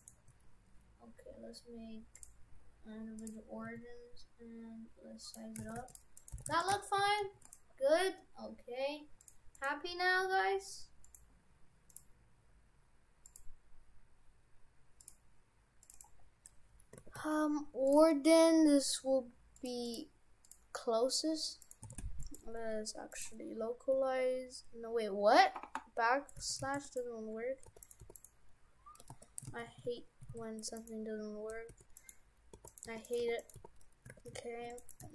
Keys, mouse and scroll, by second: 0.0 shift+right click, 2.2 click, 3.7 s, 5.6 shift+f, 6.2 right click, 6.4 shift+f, 9.2 click, 9.6 click, 11.1 click, 13.3 click, 17.0 shift+f, 19.6 click, 19.9 click, 21.7 right click, 21.9 shift+f, 23.1 right click, 23.9 \, 26.4 shift+f, 27.7 h, 27.9 right click, 28.1 h, 28.2 right click, 29.1 ctrl+z, 29.5 ctrl+z, 29.9 ctrl+z, 30.4 ctrl+z, 30.8 right click, 31.7-35.1 typing, 32.0 right click, 32.7 right click, 33.1 right click, 33.5 right click, 34.9 right click.